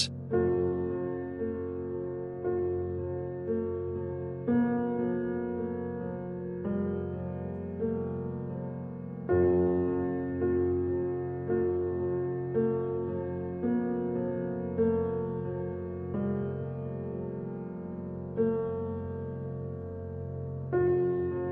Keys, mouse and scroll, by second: 1.1 ctrl+KP_Add, 2.5 middle click, 3.5 s, 8.5-9.8 drag, 10.5 alt+shift+click, 11.6 alt+shift+click, 12.1 alt+shift+click, 13.5 middle click, 14.1 s, 20.7-21.5 drag.